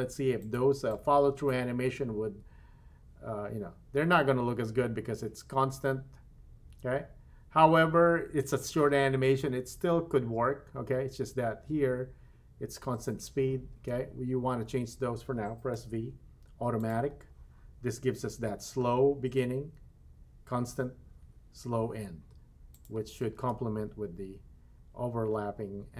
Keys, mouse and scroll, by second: 0.4 click, 1.9 space, 13.8 space, 15.7 v, 22.8-25.9 drag, 23.4 space.